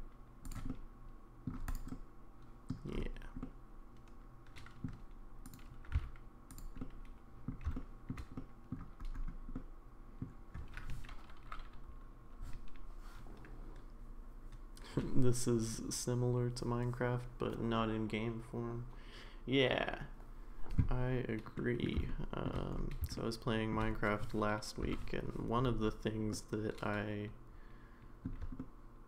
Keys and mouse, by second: 0.7 middle click, 1.7 click, 1.9 middle click, 3.4-4.8 middle drag, 5.5 click, 5.9 g, 6.8 middle click, 7.7 middle click, 8.4 middle click, 9.5 middle click, 21.5 middle click, 22.1 shift+middle click, 23.1 shift+middle click, 24.8 k, 26.3-29.0 middle drag.